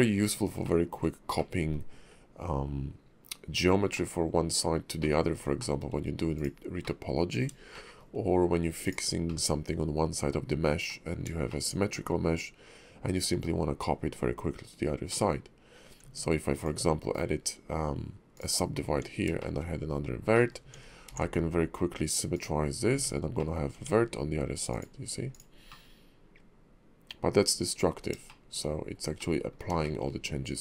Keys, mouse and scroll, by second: 0.6 shift+middle click, 1.3 middle click, 3.5-3.9 scroll up 2, 3.9 middle click, 5.0 middle click, 5.6 shift+middle click, 6.3 click, 6.8 middle click, 7.7 shift+middle click, 8.8 click, 9.3 middle click, 10.8 middle click, 11.4 shift+middle click, 12.1-13.9 scroll down 1, 13.9-14.5 scroll down 1, 15.1 middle click, 16.0 Tab, 16.5 click, 17.1 right click, 18.9 Tab, 19.4 shift+middle click, 20.3 middle click, 20.6 Tab, 21.1 alt+x, 22.3 click, 22.9 Tab, 23.3 middle click, 23.7 Tab, 24.7 click, 25.3 click, 25.7 middle click, 28.3 shift+middle click, 29.1 middle click, 29.8 shift+middle click.